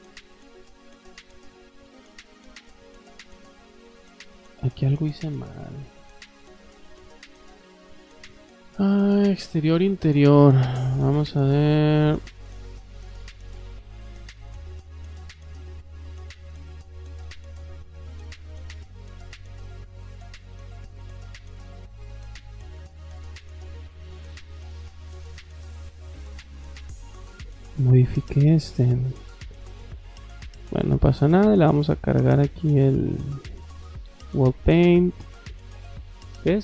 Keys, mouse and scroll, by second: 0.1 click, 1.4 click, 2.0 middle click, 2.0 scroll down 1, 3.2 click, 4.2 click, 9.3 click, 11.9 click, 18.7 click, 19.5 click, 21.5 click, 26.3 click, 31.0 click, 32.1 middle click, 34.1 click.